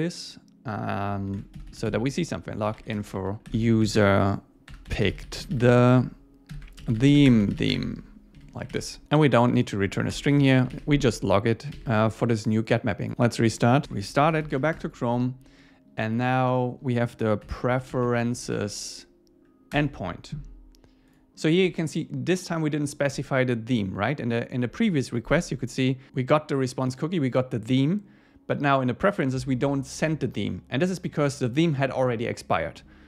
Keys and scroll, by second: 1.3 shift+super+Left, 3.0 Return, 8.4 ↻, 8.7 super+s, 10.7 super+s, 14.7 Return, 19.7 Return.